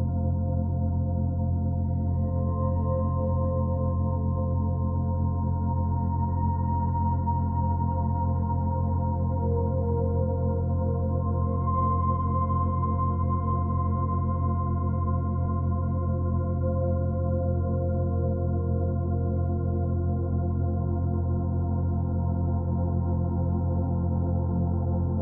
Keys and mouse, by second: 0.3 click, 0.9-3.4 drag, 4.1 g, 4.6 click, 6.0 click, 6.4 click, 7.2-8.9 ctrl+alt+drag, 8.9 g, 9.4 click, 12.3 click, 12.4 space, 13.4 space, 14.0-17.2 drag, 16.9 g, 16.9 space, 17.3-19.6 drag, 20.5 click, 21.6 click, 21.9-24.2 typing, 24.1-25.2 drag.